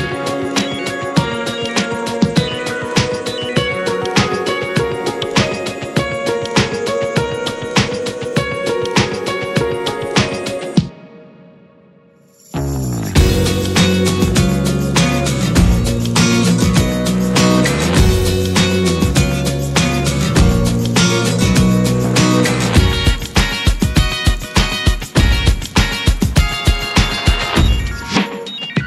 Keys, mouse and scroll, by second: 0.0 s, 0.9-1.2 scroll down 4, 1.2-1.9 middle drag, 1.9 click, 2.7 drag, 3.0 middle click, 3.3-3.7 scroll up 2, 3.5 shift+middle drag, 4.0-5.9 middle drag, 5.9-8.8 drag, 9.1-10.6 drag, 10.6 middle drag, 10.8 scroll up 1, 11.0-11.8 shift+middle drag, 11.8-12.9 drag, 12.9 scroll up 1, 13.1 alt+middle click, 14.1 alt+middle click, 14.3-14.8 alt+scroll up 3, 14.9 alt+middle click, 15.6 scroll up 2, 15.8-16.4 shift+middle drag, 16.4 r, 20.5-21.5 drag, 21.8 r, 24.4 alt+middle click, 25.4 r, 28.3-28.8 drag.